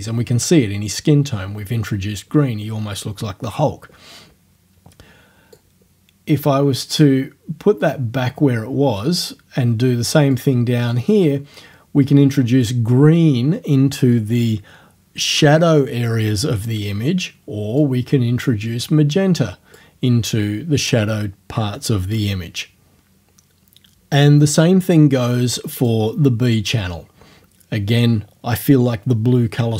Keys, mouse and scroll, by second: 5.6-7.2 drag, 7.8 right click, 10.4-12.8 drag, 17.8-20.0 drag, 25.8 click.